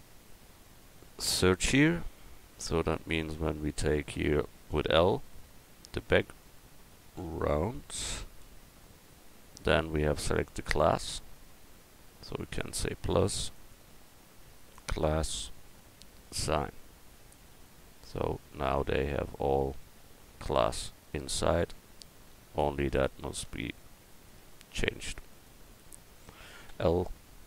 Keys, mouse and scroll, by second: 4.7 l, 5.6 middle click, 7.5 a, 8.4 l, 12.6-17.4 drag, 17.4 middle click, 17.5-19.4 drag, 23.8 Tab, 24.1 click, 24.4 Tab, 26.7 l.